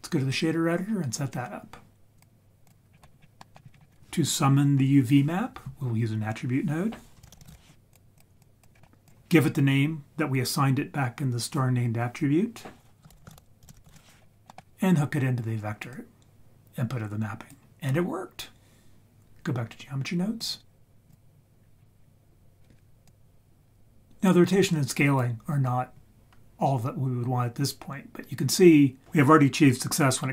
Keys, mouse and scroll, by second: 2.2-2.7 drag, 2.9-3.4 scroll down 6, 3.4 middle click, 3.7-4.8 scroll up 7, 7.2 shift+a, 7.5 t, 8.4 click, 8.8 scroll up 4, 9.1 click, 14.2-14.6 scroll down 3, 14.4 middle click, 15.9-17.5 drag, 20.4-21.1 drag, 21.8 scroll down 7, 21.9-22.8 scroll down 2, 23.1-25.2 drag.